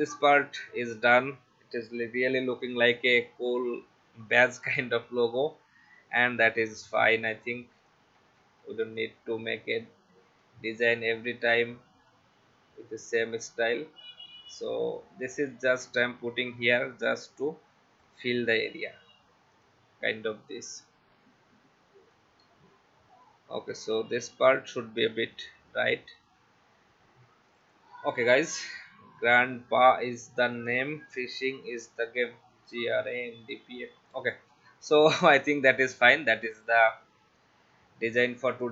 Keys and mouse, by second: 0.0 click, 2.6 click, 6.5 space, 6.7 click, 7.9 click, 9.7 click, 10.2 shift+x, 12.2 alt+shift+click, 13.4 v, 13.8 click, 15.6 alt+click, 19.5 shift+click, 20.8 click, 22.0 Left, 22.6 Right, 23.7 click, 25.3 Right, 26.2 click, 27.5 click, 34.2 click.